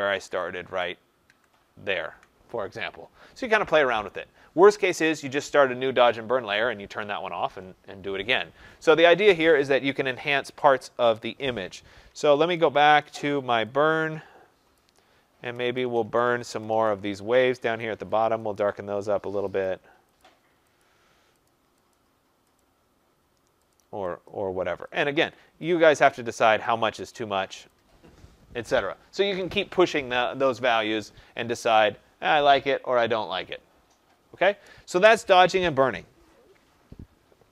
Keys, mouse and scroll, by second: 0.1 ctrl+z, 0.6 ctrl+z, 1.2 ctrl+z, 12.1 ], 12.3 ], 12.6 ], 12.8 ], 14.7 click, 15.3-16.9 typing, 17.7 click, 18.3 click, 19.6 click, 20.1 click, 20.7 click, 21.4 click, 21.8 click, 22.5 click, 23.6 click, 24.2 click, 24.9 click, 26.1 click, 27.1 click, 27.7 click, 31.7 click, 32.5 click.